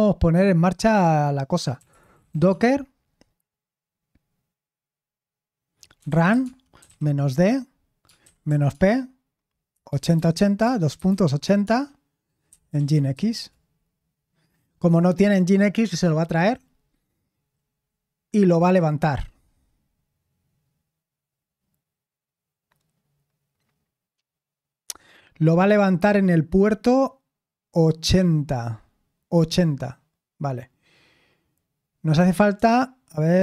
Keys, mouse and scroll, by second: 1.5-2.8 typing, 5.7-13.6 typing, 15.1 typing.